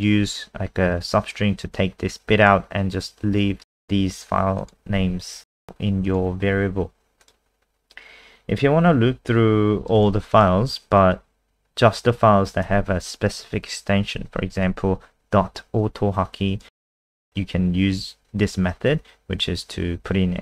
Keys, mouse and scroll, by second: 1.7 click, 4.8 Escape, 5.4 click, 5.5 Escape, 6.0 click, 7.6-8.9 scroll down 2, 8.9 click, 10.1 ctrl+c, 10.3 click, 12.7 ctrl+a, 14.1 ctrl+v, 15.8 click, 17.2 shift+Right.